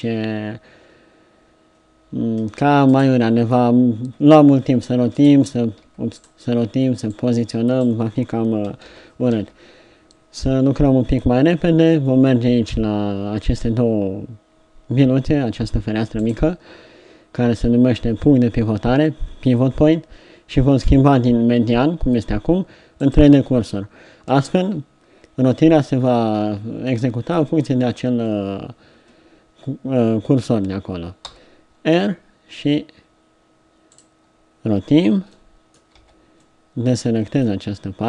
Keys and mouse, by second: 4.8 r, 5.9 r, 7.1-8.9 drag, 8.9 ctrl+z, 9.4 ctrl+z, 16.3-20.4 drag, 31.3 r, 36.0 b.